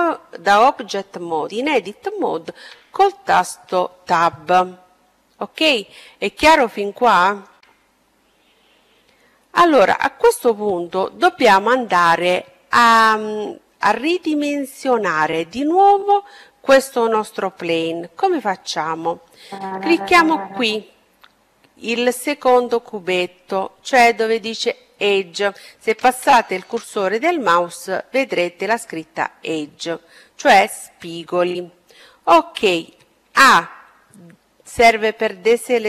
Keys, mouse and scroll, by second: 1.4 Tab, 4.2 middle click, 5.6-7.3 middle drag, 7.5 middle click, 10.9-12.8 right drag, 18.8-21.0 drag, 32.2 a.